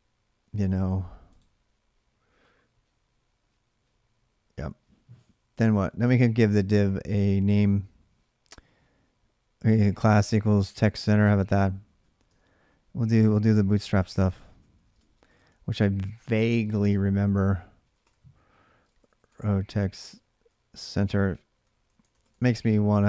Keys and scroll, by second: 12.9 Left, 13.6-22.9 typing.